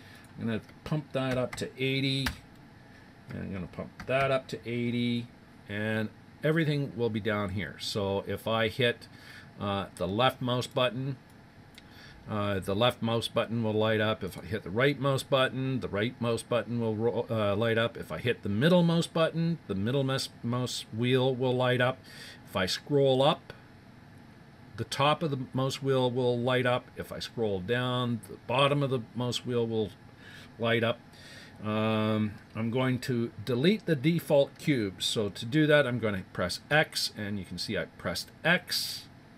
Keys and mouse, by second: 0.1-2.3 drag, 11.3 click, 14.3-16.2 right drag, 18.6-20.5 middle drag, 22.3-25.7 middle drag, 26.5-29.8 middle drag, 36.7 x.